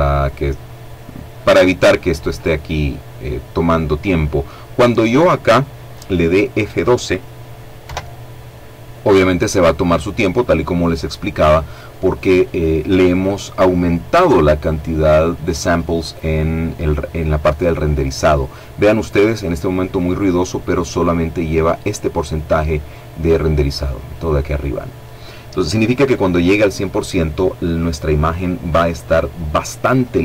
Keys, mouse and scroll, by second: 6.8 F12.